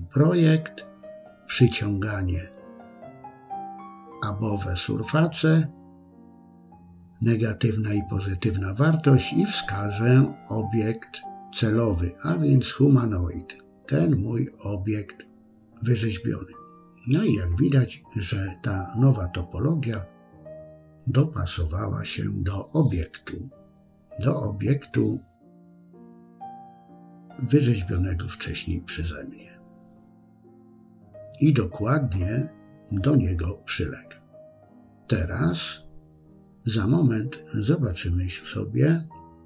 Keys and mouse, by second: 2.7-4.1 drag, 6.9 click, 9.8 click, 15.2-18.4 middle drag, 18.8 middle click, 20.0 KP_1, 23.5 click, 25.9 click, 26.5-28.0 middle drag, 28.6 KP_1, 31.9 click, 37.8 Tab.